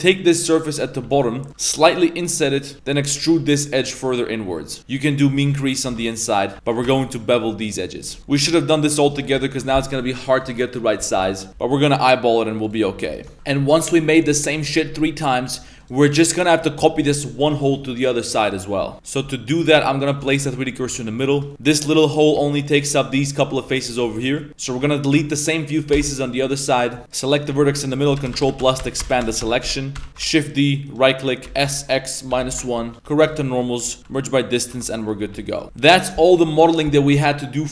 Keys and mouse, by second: 0.8 click, 1.0 z, 1.2 middle click, 1.7 i, 2.7 alt+3, 2.9 middle click, 3.3 e, 5.1 click, 5.8 2, 6.0 alt+right click, 6.6 ctrl+b, 8.2 Tab, 8.2 middle click, 8.3 Tab, 8.4 middle drag, 9.0 3, 9.1 right click, 9.4 ctrl+shift+right click, 10.8 middle click, 11.7 i, 12.8 2, 13.1 alt+right click, 13.3 a, 15.5 right click, 15.8 right click, 17.6 shift+middle click, 18.2 middle drag, 18.6 middle drag, 18.9 middle click, 19.6 1, 20.0 alt+right click, 20.3 shift+s, 21.3 shift+middle click, 21.7 3, 22.0 right click, 24.2 middle click, 24.7 right click, 25.0 ctrl+shift+right click, 25.3 middle click, 25.9 x, 27.0 1, 27.1 right click, 28.1-30.1 ctrl+KP_Add, 30.5 shift+d, 31.5 s, 32.9 shift+KP_Decimal, 33.3 shift+n, 33.4 middle drag, 33.8 a, 34.0 m, 34.8 Tab, 34.8-35.1 middle drag, 35.2 a, 35.5 middle drag, 36.1 middle drag, 36.5-36.9 middle drag.